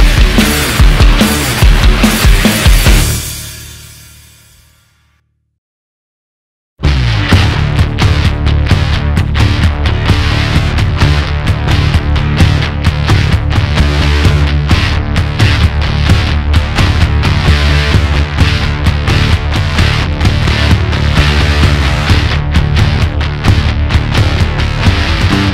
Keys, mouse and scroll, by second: 2.4 click, 10.9-14.3 drag, 19.6 alt+z, 20.3 click, 23.3-24.7 middle drag, 24.7-25.2 scroll up 2, 25.2 shift+click.